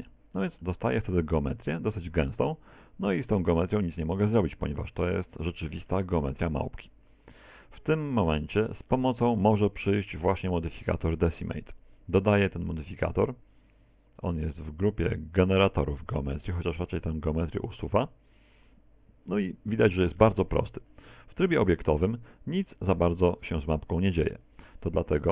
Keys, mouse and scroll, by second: 0.4 middle click, 0.4-1.6 scroll up 5, 1.6-2.0 scroll up 2, 2.5-3.7 scroll down 3, 2.9 z, 3.7 Tab, 4.2 middle click, 4.9 middle click, 7.3 middle click, 8.9 middle click, 11.7 middle click, 13.0 click, 21.3 Tab, 22.2 middle click, 23.0 middle click, 23.5 middle click, 24.8 middle click.